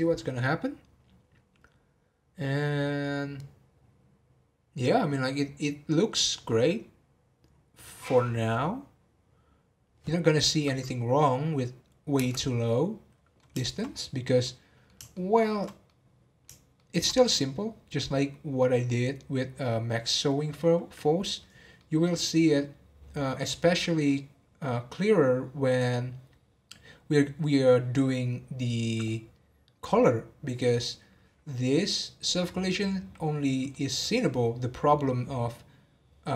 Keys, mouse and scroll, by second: 12.2 space, 12.7-13.9 middle drag, 13.9-14.4 scroll up 2, 14.4-19.9 middle drag, 21.7-27.1 middle drag, 27.1 scroll down 1, 33.7-36.3 middle drag.